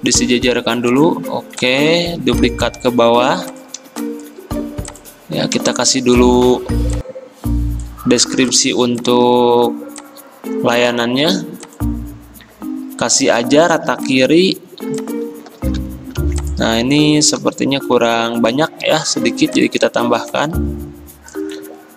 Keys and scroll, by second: 13.8 t, 15.5 ctrl+a, 16.2 ctrl+c, 17.0 ctrl+v.